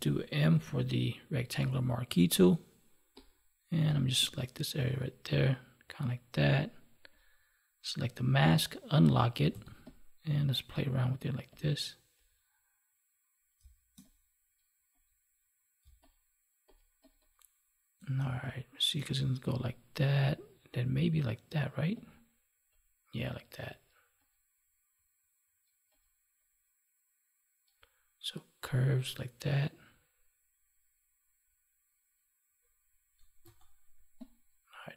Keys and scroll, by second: 13.5 space, 15.8 space, 33.4 ctrl+z.